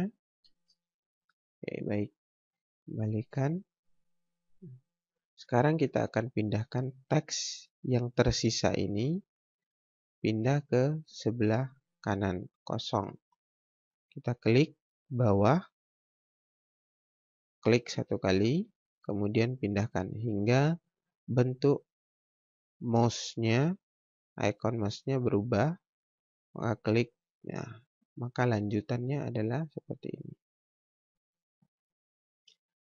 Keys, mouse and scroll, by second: 0.5 ctrl+space, 2.7 click, 8.8 click, 13.8 click, 18.4 click, 26.8 click, 32.3 click.